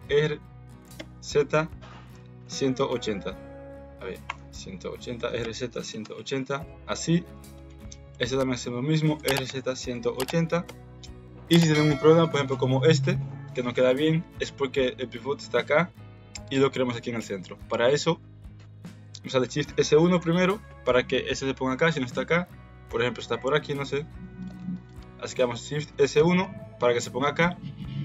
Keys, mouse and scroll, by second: 0.8 r, 5.1 r, 7.6 click, 9.1 r, 14.0 ctrl+z, 19.6 shift+s, 25.9 shift+s.